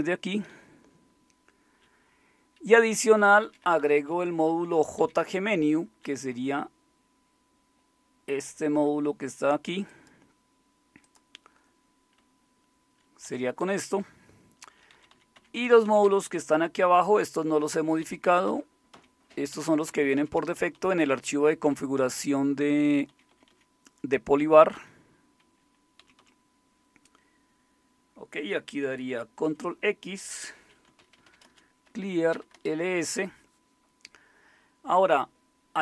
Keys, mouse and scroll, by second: 0.0 Up, 0.5 Down, 1.1-6.3 typing, 8.3-9.0 typing, 9.9-12.2 drag, 12.2 Up, 12.8-13.2 Up, 13.6 Down, 14.3-14.9 Down, 15.3 Up, 15.5 Up, 15.8 Down, 16.0 Down, 18.0 Page_Down, 18.5 Page_Down, 18.9 Page_Down, 19.5 Page_Down, 19.9 Page_Down, 20.9 Page_Down, 21.2 Page_Up, 21.4 Page_Up, 21.6 Page_Up, 22.0 Page_Down, 22.3 Page_Down, 22.6 Page_Down, 23.1 Page_Up, 23.5 Page_Up, 23.9 Page_Up, 24.7 Page_Up, 26.0 Page_Down, 26.2 Page_Down, 29.4 ctrl+x, 29.4 typing, 30.5-32.4 typing, 32.5 Return.